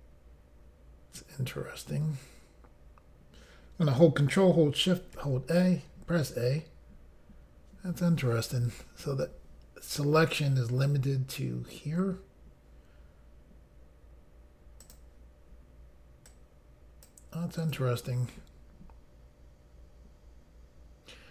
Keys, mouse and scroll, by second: 5.2 ctrl+shift+a, 14.8 click, 16.3 click, 17.6 click.